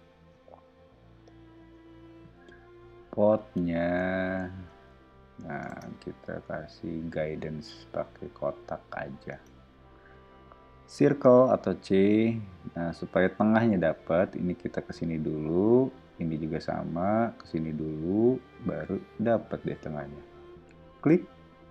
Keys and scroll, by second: 0.0 o, 5.6 space, 6.1 r, 9.3 space, 11.0 c.